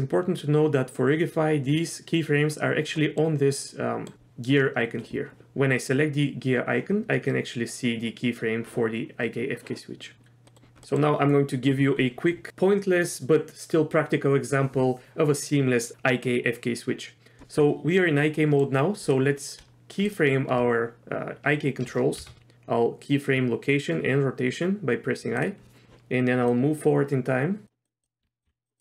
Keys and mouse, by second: 2.5 click, 3.0 middle click, 3.7-4.0 middle drag, 10.4 middle drag, 10.8 middle click, 18.3 middle click, 19.0 click, 22.2 i, 26.5 click, 28.2 r, 28.4 g.